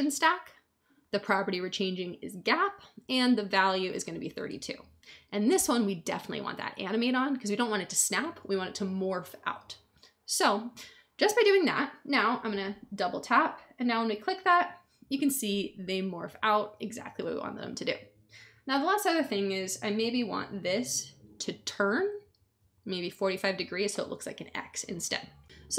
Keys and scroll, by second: 3.8-4.7 typing.